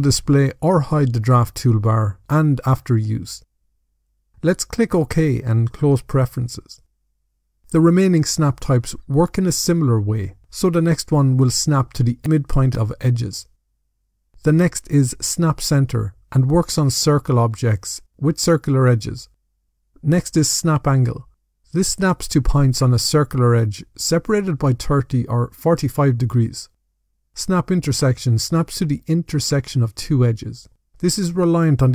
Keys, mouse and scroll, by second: 5.2 click, 9.5 click.